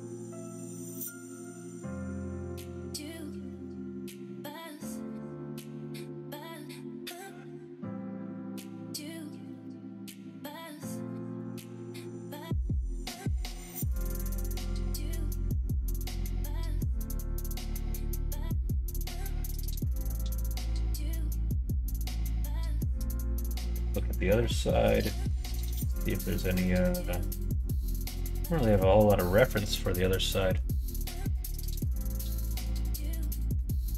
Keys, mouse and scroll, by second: 0.7 scroll up 1, 0.7 middle click, 1.3 scroll down 1, 2.4-4.7 drag, 5.1 middle click, 5.6 click, 5.9 Tab, 6.8-9.3 middle drag, 9.6 Tab, 9.9 middle click, 10.6 alt+z, 11.1 click, 12.1 p, 13.4 Tab, 14.8-17.5 drag, 18.0 middle click, 18.7 click, 19.1 middle click.